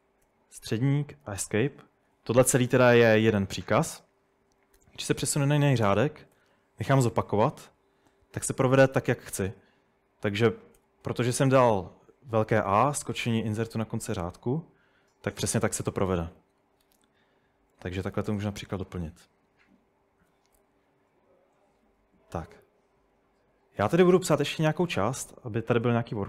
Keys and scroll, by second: 0.3 ;, 1.3 Escape, 4.8 typing, 6.4 typing, 8.0-9.2 typing, 10.8 typing, 17.7-18.6 typing, 24.1-26.2 typing.